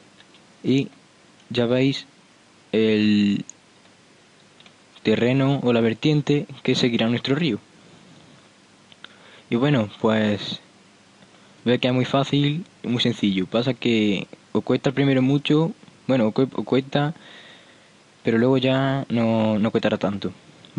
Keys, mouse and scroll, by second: 0.4 Tab, 0.9-2.4 middle drag, 2.8 middle click, 3.4-4.2 middle drag, 4.6 middle click, 7.4-9.1 middle drag, 10.6-15.0 middle drag, 15.3 p, 16.4 p, 16.8-17.8 middle drag, 19.8-20.7 middle drag.